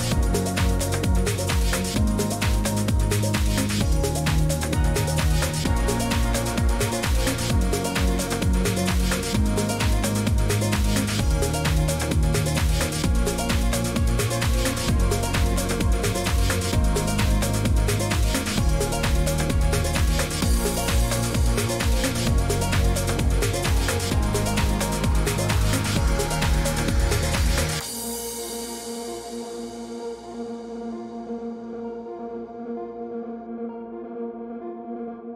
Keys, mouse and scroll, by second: 0.0-35.3 typing, 1.3 click, 3.5 click, 7.4 click, 9.2 click, 11.9 click, 12.6 click, 13.6 middle click, 13.6 middle click, 13.7 middle click, 20.3 click, 22.4 middle click, 22.4 scroll, 25.9 click, 30.6 click, 31.4 scroll.